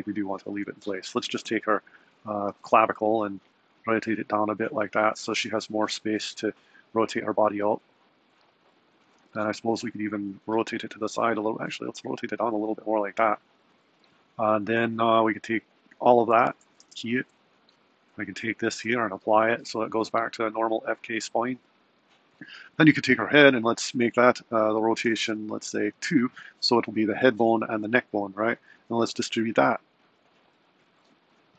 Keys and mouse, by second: 0.4 click, 2.5 r, 3.8 r, 7.2 click, 7.8 r, 9.1 r, 11.4 r, 16.5 a, 16.8 i, 17.7 click, 19.2-20.2 drag, 22.2 click, 25.6 click, 28.9-31.4 drag.